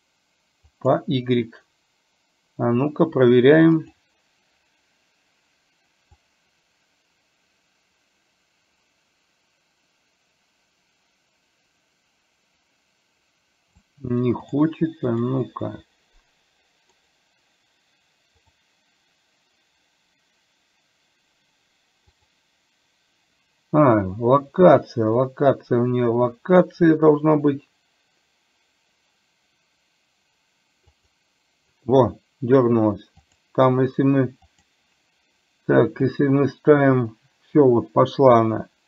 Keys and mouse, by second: 4.0 click, 6.5-13.9 drag, 14.6 click, 15.2 click, 17.1-31.9 right drag, 33.4 click, 36.2-38.8 drag.